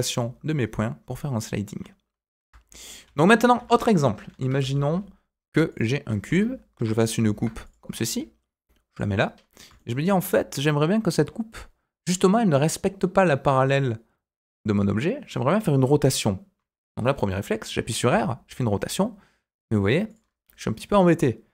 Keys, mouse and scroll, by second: 3.5 Tab, 4.3 Delete, 4.6 shift+a, 6.3 Tab, 7.2 ctrl+r, 9.7 shift+middle click, 18.0 r.